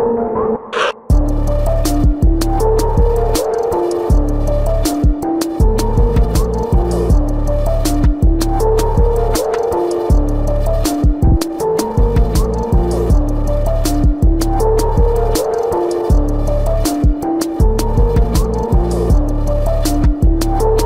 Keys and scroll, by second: 2.2 ctrl+=, 2.8 space, 2.9 ctrl+=, 4.7 ctrl+alt+z, 4.9 ], 5.1 space, 7.1 space, 7.6 space, 7.9 space, 11.1 space, 11.6 space, 15.1 space, 18.4 space, 18.9 ctrl+-, 19.5 space, 20.1 ctrl+-.